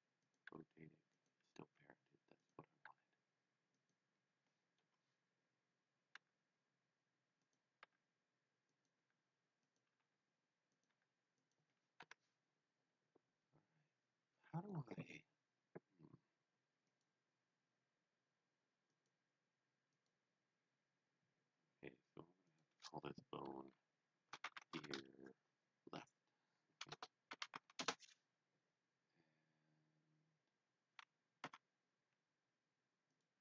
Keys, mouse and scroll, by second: 0.2 click, 0.5 g, 1.1 click, 1.6 s, 2.3 click, 3.0 g, 3.7 click, 4.7 KP_3, 6.2 g, 7.4 click, 7.8 r, 8.7 click, 8.9 g, 9.6 click, 9.9 r, 10.7 click, 10.9 g, 11.4 click, 11.9 KP_1, 16.8 KP_1, 16.9 click, 19.8 click, 20.5 scroll down 1, 22.5 click, 24.0-25.0 typing, 26.9 BackSpace, 27.8 Return, 31.3 Return, 33.0 click.